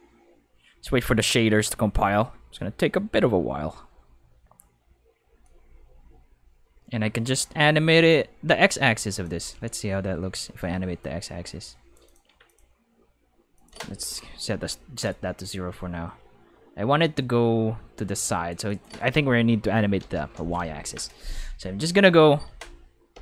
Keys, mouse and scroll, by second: 4.7 5, 5.4-9.2 drag, 10.1-11.0 middle drag, 11.0 click, 12.1 click, 12.2 5, 12.4 click, 13.5 click, 14.4 g, 14.9 click, 15.5-18.5 drag, 18.7 click, 19.7 0, 20.0 Return, 23.1 5.